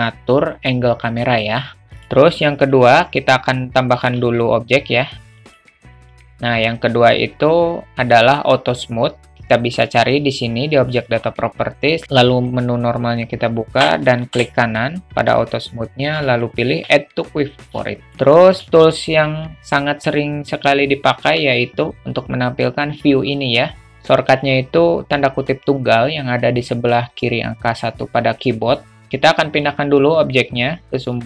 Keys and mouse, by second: 2.1 click, 4.0 shift+a.